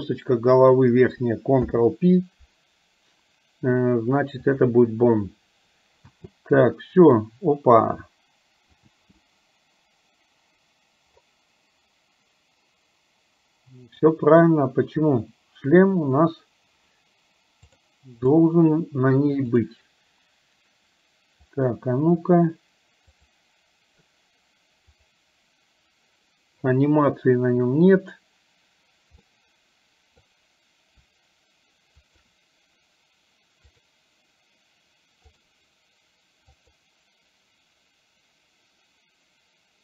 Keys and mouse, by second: 1.6 ctrl+p, 6.2 space, 7.4-9.0 middle drag, 9.0 space, 14.0 click, 17.7 click, 19.5 click, 21.7 click, 23.1 click, 25.0 click, 29.4 middle click, 32.2 shift+click, 33.7-35.7 drag, 36.5 click.